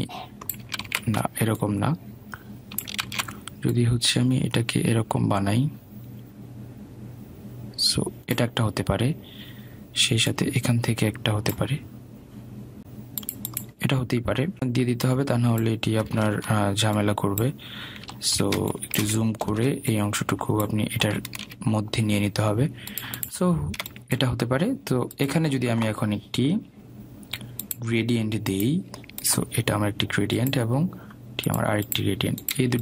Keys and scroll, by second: 2.0 ctrl+z.